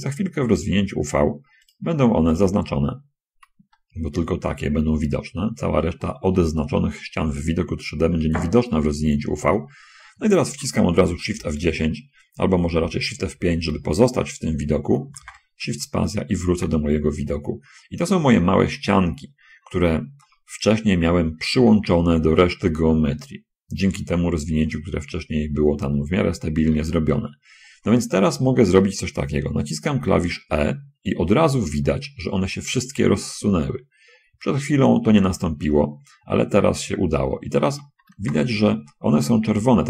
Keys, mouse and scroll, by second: 0.4 shift+right click, 2.0 shift+right click, 2.3 shift+right click, 3.3-3.7 shift+scroll up 1, 3.7 shift+middle click, 4.8-6.0 shift+middle drag, 11.2 shift+F10, 13.6 shift+F5, 15.5 shift+space, 16.8 shift+space, 18.9-20.0 shift+middle drag, 30.2 e, 38.2 shift+space, 39.7 middle click.